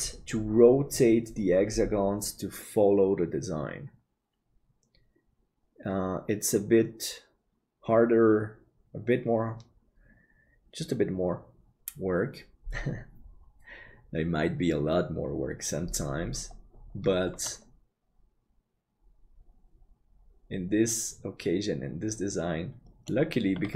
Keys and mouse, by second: 17.4-23.7 middle drag.